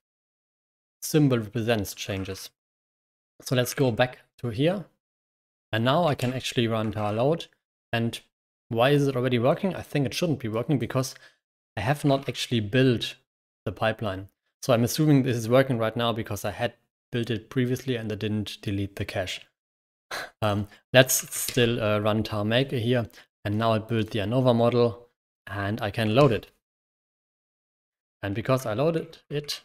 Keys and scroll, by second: 1.9-2.9 typing, 3.7 ctrl+6, 6.1 ctrl+Return, 6.8 ctrl+l, 7.1 typing, 11.8-12.6 typing, 21.1 k, 21.4 ctrl+Return, 26.1 ctrl+Return, 28.8-29.6 typing, 29.0 Escape.